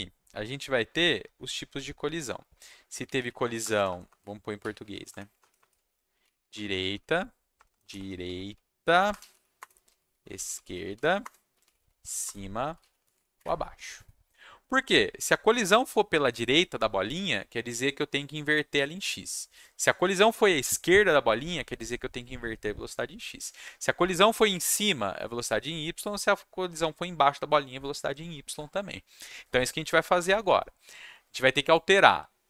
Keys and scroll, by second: 2.6-13.5 typing, 5.6 Caps_Lock, 9.6 Return.